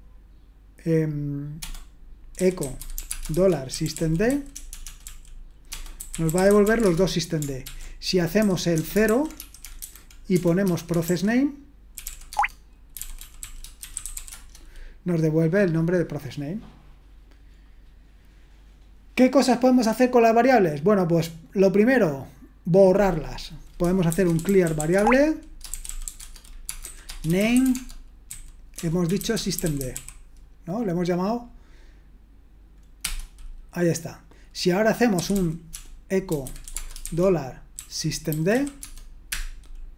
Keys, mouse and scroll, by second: 1.6-7.1 typing, 7.6 ctrl+p, 8.4-14.6 typing, 12.3 Tab, 24.1-30.4 typing, 33.0 Return, 34.9-39.0 typing, 39.3 Return.